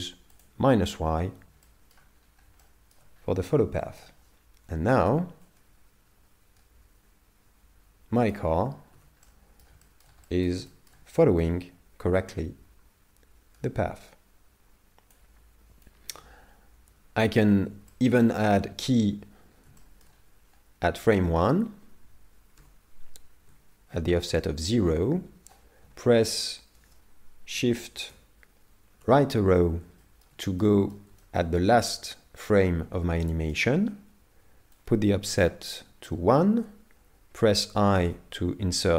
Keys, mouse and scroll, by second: 0.4 click, 1.7 shift+middle click, 2.2 scroll down 4, 2.6 shift+middle click, 3.2-3.6 scroll up 4, 3.8 shift+middle click, 5.5 click, 9.2 middle click, 9.8 shift+middle click, 10.3 middle click, 10.7 shift+middle click, 12.4 click, 15.9 click, 17.9 shift+middle click, 18.3 middle click, 19.8 shift+middle click, 22.6 i, 28.1 shift+Right, 29.6-30.2 scroll down 3, 30.0 shift+middle click, 30.6 middle click, 31.2 shift+middle click, 33.2 middle click, 34.8 click.